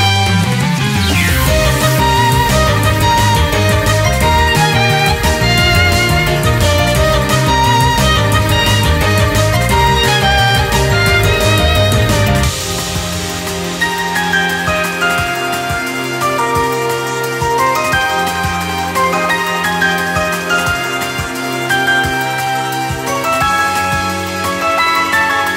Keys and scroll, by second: 0.0-3.5 typing, 5.1 typing, 6.3 ctrl+-, 6.6 ctrl++, 6.7 typing, 8.9 ctrl+-, 10.0 ctrl+-, 10.3 ctrl++, 13.6 ctrl+=, 13.8 ctrl++, 20.0 typing, 20.2 ctrl++, 22.4 typing, 23.1 ctrl+-, 23.7 typing.